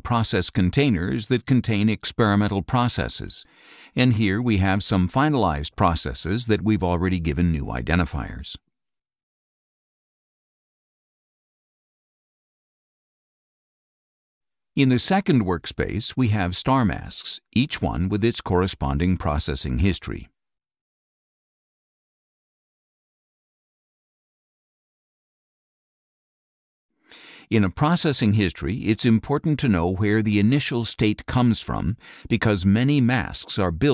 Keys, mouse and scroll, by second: 0.1 click, 2.9 click, 3.8-6.3 drag, 6.8 click, 7.5 click, 9.5 click, 10.7 click, 12.0 click, 13.4 click, 15.6 click, 18.5 click, 20.5 click, 23.8 click, 24.6 right click, 25.6 click, 30.5 click.